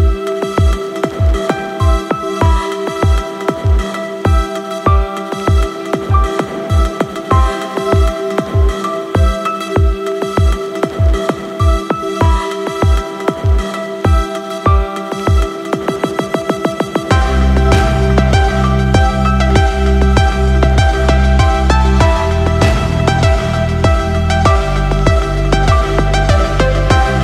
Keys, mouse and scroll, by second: 3.5 click, 4.2-5.2 scroll down 2, 5.2 click, 7.1 click, 10.4-11.1 scroll up 2, 11.1-11.7 scroll down 2, 11.7-12.7 middle drag, 13.7 shift+a, 18.5 click, 24.6 click, 24.7-27.2 drag.